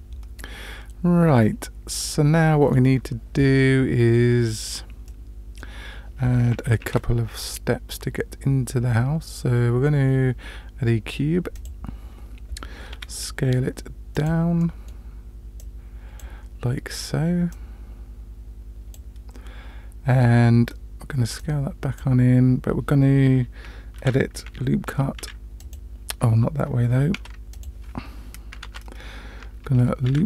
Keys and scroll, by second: 6.8 shift+a, 12.9 s, 24.0 Tab, 25.2 ctrl+r, 28.6 ctrl+z, 30.1 ctrl+r.